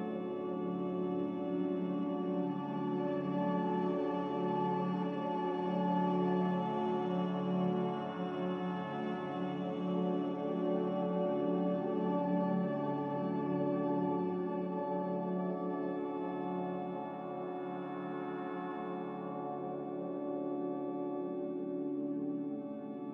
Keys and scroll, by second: 0.9 a, 3.6 ctrl+c, 14.5 ctrl+c, 19.5 m.